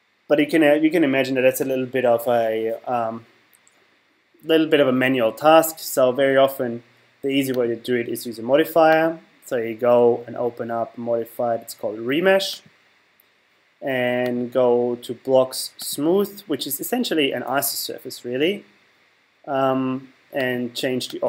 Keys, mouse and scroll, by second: 7.6-10.6 drag, 14.2 click, 20.4 click.